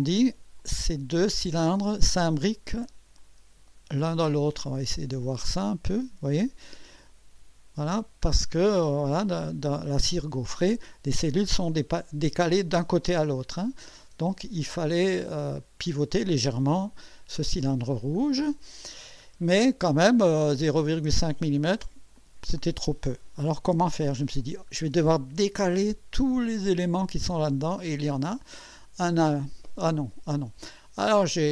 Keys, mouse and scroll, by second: 0.6-2.4 drag, 2.4-2.7 scroll up 1, 3.2-4.3 drag, 4.5-7.1 drag, 8.3-8.6 scroll down 1, 8.9 click, 9.0 middle click, 9.0 click, 9.2 middle click, 9.5 click, 9.6 middle click, 9.8 middle click, 9.8 click, 10.0 middle click, 10.5 click, 11.2 middle click, 11.6 click, 12.5 middle click, 13.0 click, 13.3 scroll up 1, 13.9-15.9 drag, 18.2-19.4 scroll down 6, 20.1 click, 21.3 click, 22.2-22.9 drag, 23.5 KP_6, 24.4 scroll down 2.